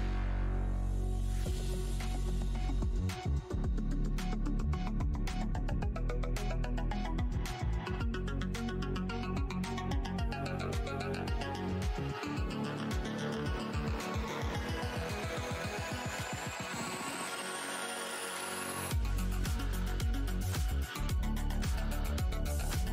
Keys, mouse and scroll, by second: 2.5 ctrl+s, 2.5 w, 3.9 alt+click, 6.3 Left, 6.7 space, 7.2 click, 8.2 right click, 8.4 click, 8.9 shift+right click, 9.3 alt+scroll up 1, 11.8 scroll down 1, 13.8 click, 14.1 shift+right click, 14.3 scroll down 1, 15.0-15.4 alt+scroll up 1, 17.3 w, 18.0 click, 18.5-19.2 scroll down 1, 20.7 right click, 21.0 click, 21.4 shift+right click, 22.1 alt+click, 22.3-22.7 alt+scroll up 1.